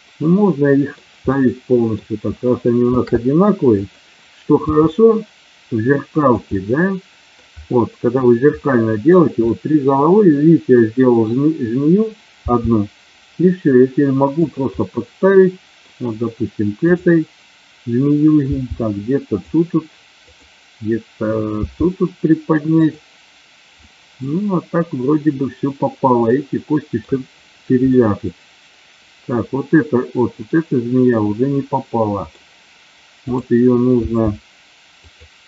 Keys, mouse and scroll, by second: 1.3 scroll up 2, 1.3 middle click, 2.8 shift+d, 3.8 click, 4.6 r, 6.3 click, 6.5 middle click, 8.6 middle click, 9.4-11.3 middle drag, 12.4 g, 14.4 click, 14.8-15.8 middle drag, 16.8 click, 18.5 g, 19.3 click, 20.4 click, 21.5 g, 22.8 click, 23.8-24.3 scroll up 1, 24.3-27.0 middle drag, 28.0-32.4 middle drag, 33.9 g, 35.0 click.